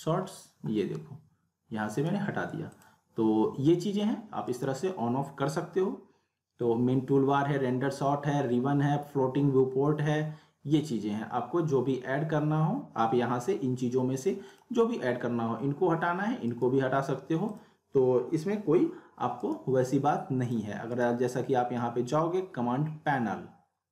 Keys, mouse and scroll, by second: 1.9 right click, 2.7 click, 4.5 right click, 14.5 click, 16.4 right click, 17.6 click, 19.4 right click, 20.4 click, 20.9 right click.